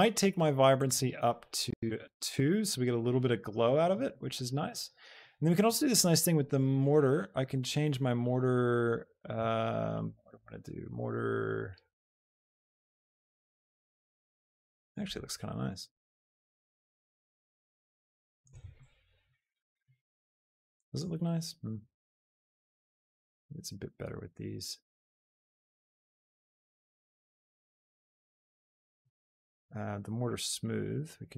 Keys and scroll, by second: 1.9 Return.